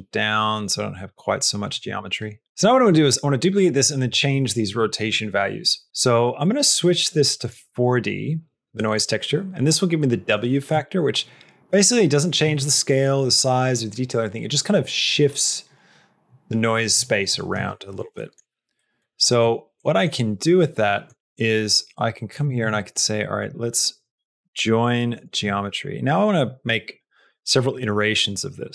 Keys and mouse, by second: 1.8 middle click, 6.3-7.4 drag, 8.8 middle click, 10.6-12.2 shift+drag, 18.1 shift+middle click, 18.7 middle click, 19.8 middle click, 20.8 middle click, 21.7 click, 22.2 click, 22.5 shift+a.